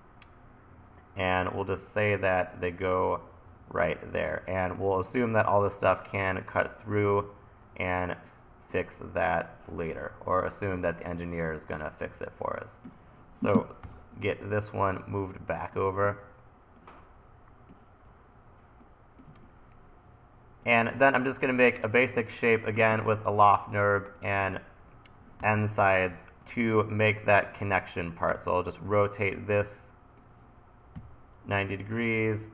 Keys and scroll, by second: 10.8 1, 13.0 super+z, 13.8 l, 25.4-26.8 typing, 31.0 e, 31.4 t.